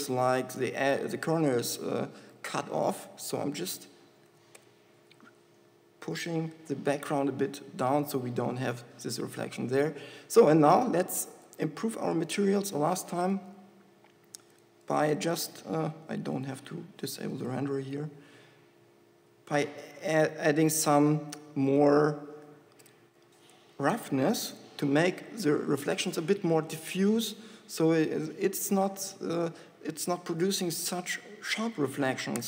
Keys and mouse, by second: 1.2 KP_0, 3.6 Tab, 4.6 g, 8.4 Tab, 12.2 z, 13.6 z.